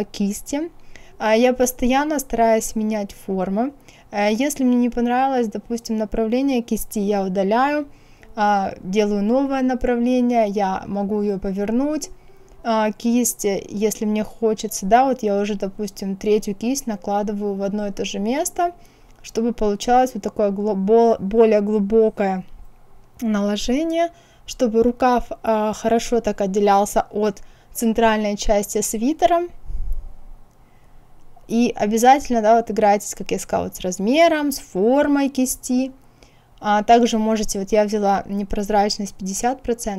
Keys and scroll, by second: 19.7 KP_1, 20.0 KP_Decimal, 20.3 KP_5, 20.8 Return, 28.9 KP_1, 29.2 KP_Decimal, 29.6 KP_5, 30.1 Return.